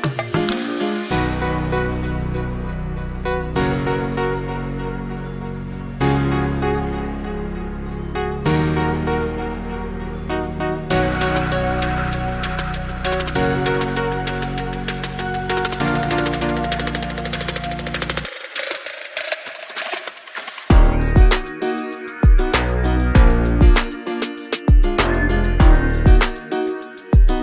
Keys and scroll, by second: 25.1 ctrl+g.